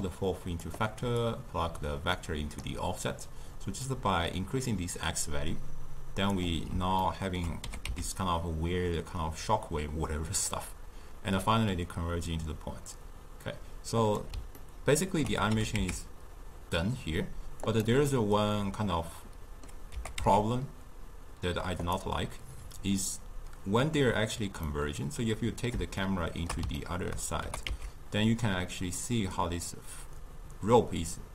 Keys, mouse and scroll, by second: 1.2 drag, 3.8-6.9 drag, 7.0-7.6 ctrl+middle drag, 7.6 g, 14.6-15.6 ctrl+middle drag, 15.6 g, 18.1-20.0 middle drag, 20.0 g, 24.7-27.4 middle drag, 27.4 g.